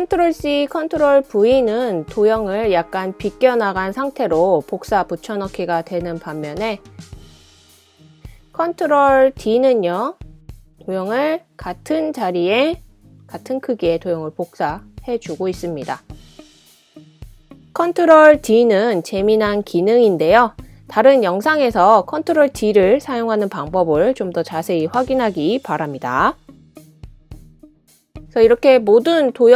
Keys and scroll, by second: 7.4 super+c, 7.5 super+v, 9.2 ctrl+super+d, 15.6 BackSpace, 17.0 super+d, 21.4 super+d, 22.0 super+d, 22.4 super+d, 23.8 super+d, 24.3 super+d, 24.8 super+d.